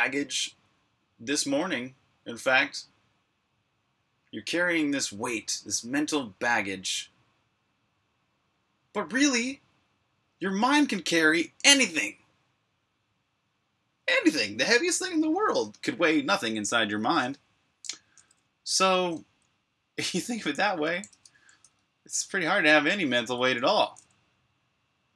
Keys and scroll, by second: 21.0 super+Tab, 23.5 super+\, 23.9-25.1 typing.